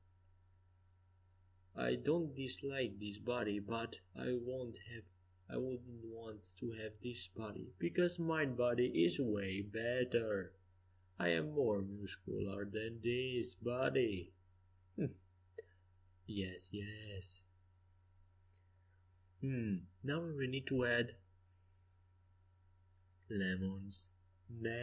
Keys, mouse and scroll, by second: 0.0-0.5 typing, 1.3 middle click, 2.3 Tab, 2.9 right click, 4.2 click, 5.1-6.9 drag, 5.9-7.7 right drag, 7.7-9.7 drag, 10.5 middle click, 12.2-14.1 drag, 15.3-17.7 middle drag, 18.1-20.5 right drag, 18.8-20.0 drag, 20.4 middle click, 21.2 Tab, 21.7 Tab, 22.2-23.2 right drag, 23.9 Tab.